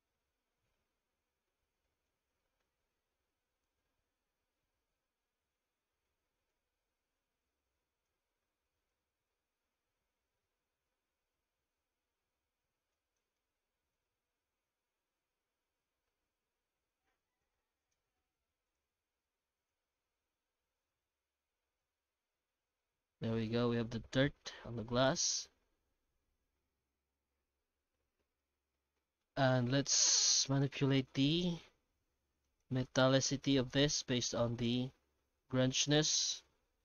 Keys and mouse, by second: 2.2 middle click, 3.7-6.5 shift+drag, 7.2 click, 9.0-13.3 shift+drag, 13.9-17.7 shift+drag, 17.8 click, 22.4-22.8 middle drag, 23.5-26.8 middle drag, 29.7 shift+middle click, 30.4 right click, 31.7 g, 32.9 middle click, 33.6 ctrl+s, 35.8 a, 36.1 KP_Decimal, 36.6 alt+a.